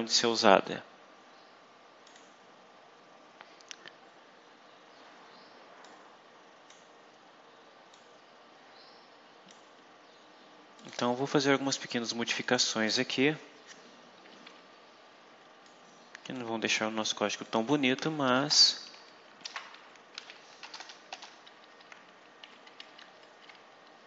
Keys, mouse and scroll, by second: 2.0 click, 5.7-6.8 drag, 7.8-9.6 drag, 9.7-10.1 scroll up 2, 10.7 click, 11.2 scroll down 1, 12.3 click, 15.6 click, 16.7 scroll down 1, 17.4 click, 18.3 Return, 19.3-20.6 typing, 21.6 shift+Down, 22.3 Delete, 22.7 Up, 22.9 Left, 24.0 shift+End.